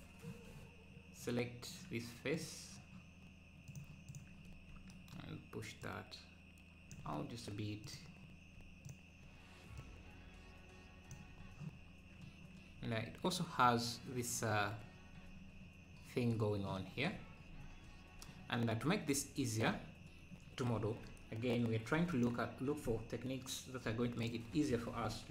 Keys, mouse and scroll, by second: 5.8-11.4 drag, 11.4-12.3 scroll down 3, 12.3 scroll down 2, 13.7-14.7 scroll up 1, 14.7-16.7 scroll up 2, 16.9 scroll down 3, 17.6 scroll up 1, 18.4 scroll down 1, 20.0-20.7 scroll up 1, 23.9 3, 24.2-25.3 drag.